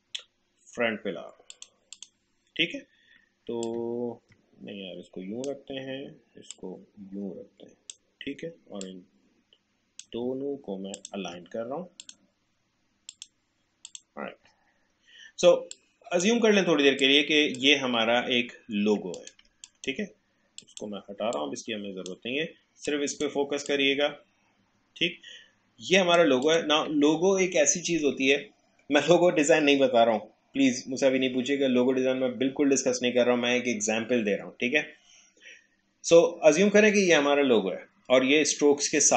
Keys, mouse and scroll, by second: 1.5-6.5 drag, 6.5-17.0 drag, 16.0-17.0 drag, 17.3-18.3 drag, 18.3 alt+scroll down 1, 19.1 click, 19.4 space, 19.6-26.4 drag.